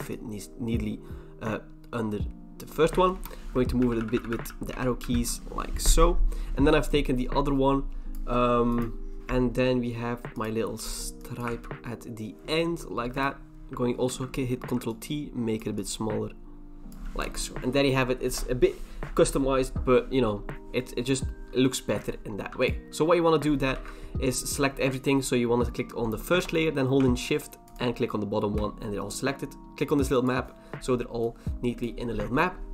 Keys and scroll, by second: 3.1 Return, 3.8 Down, 4.0 Down, 4.1 Down, 4.3 Down, 4.5 Down, 4.7 Left, 5.0 Left, 9.2 ctrl+j, 9.2 v, 11.5 ctrl+v, 14.1 ctrl+t, 17.2 Return, 23.7 ctrl+t.